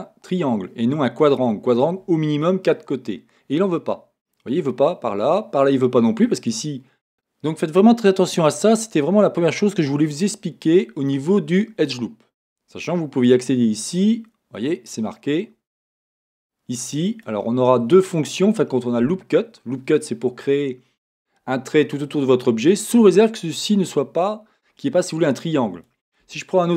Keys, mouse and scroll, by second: 17.2 click, 17.8-26.7 drag, 26.2 Tab.